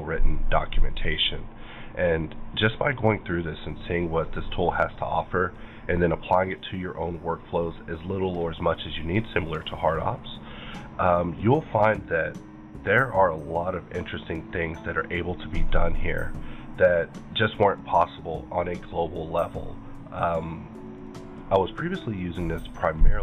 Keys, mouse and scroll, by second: 3.1 click, 4.8 click, 6.8-7.4 scroll down 1, 7.4-8.2 scroll down 6, 8.2-9.1 scroll down 4, 10.3 click, 12.1 scroll down 2, 12.8-14.2 scroll down 2, 15.6 click, 17.7 click, 18.9 scroll up 2.